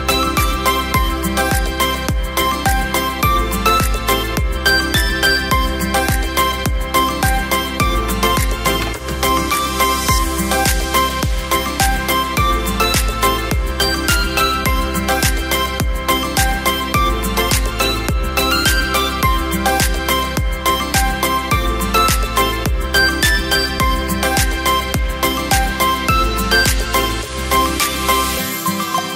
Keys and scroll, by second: 3.8 space, 11.1 v.